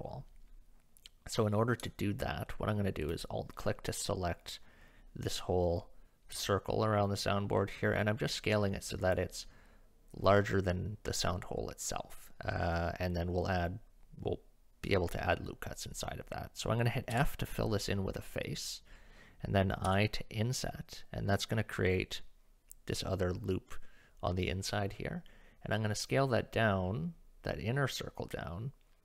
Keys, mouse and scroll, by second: 6.3 s, 17.1 f, 19.9 i.